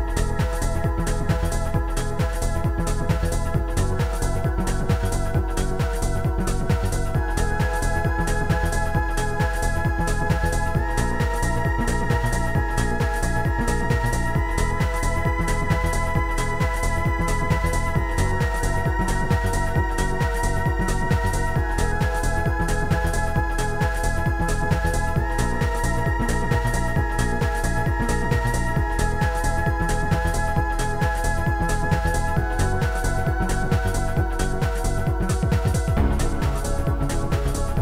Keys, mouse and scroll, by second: 1.4 click, 2.3 click, 3.3 click, 5.1 click, 6.5 click, 7.3 click, 8.6 click, 9.4 click, 12.9 click, 13.1 click, 13.5 shift+click, 14.3 shift+click, 14.5 ctrl+z, 14.5 shift+click, 14.7 shift+click, 16.0 ctrl+z, 16.0 shift+click, 17.1 ctrl+z, 17.1 shift+click, 17.8 right click, 19.0 shift+click, 20.6 shift+click, 22.1 shift+click, 22.8 shift+click, 25.5 ctrl+click, 27.6 click, 28.5 click, 28.8 click, 30.1 shift+click, 31.5 shift+click, 32.6 shift+click, 32.9 right click, 35.6 click, 36.2 click, 37.7 click.